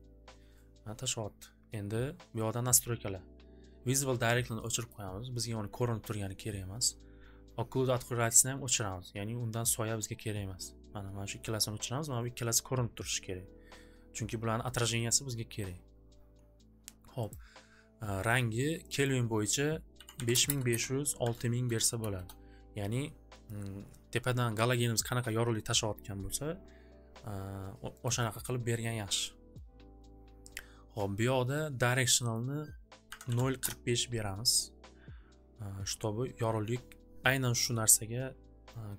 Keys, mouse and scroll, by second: 4.9-6.1 drag, 8.7 click, 11.5-13.7 drag, 17.3 click, 18.9 click, 19.1 click, 19.7-20.8 typing, 22.1 Return, 23.8-26.2 typing, 28.1 click, 28.3 click, 32.3 click, 32.8-34.3 typing, 33.7 click, 34.7-37.3 drag, 37.3 typing.